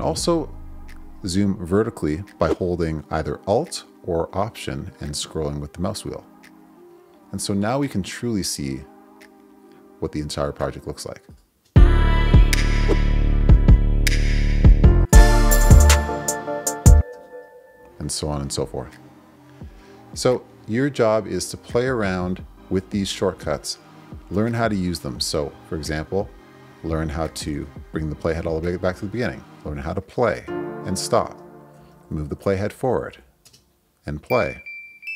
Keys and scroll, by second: 11.6 space, 17.0 space, 27.4 Return, 30.4 space, 31.7 Right.